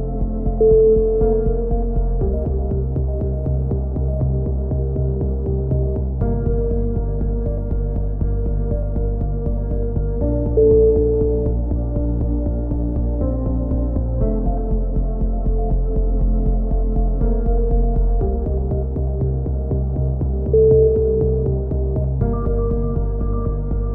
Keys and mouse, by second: 0.2 shift+s, 1.1 z, 4.2 right click, 5.0 z, 5.2-7.3 middle drag, 9.1 a, 9.5-11.6 middle drag, 12.0 click, 12.9-14.0 right drag, 14.0 e, 17.4 right click, 18.2 g, 22.6 a.